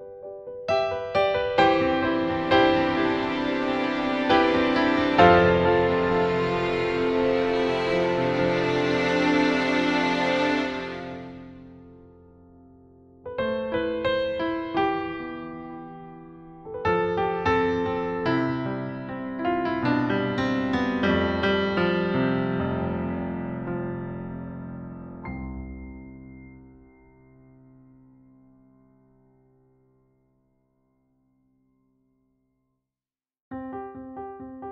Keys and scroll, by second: 1.0 b, 1.5 e, 6.4 b, 29.7-31.9 typing.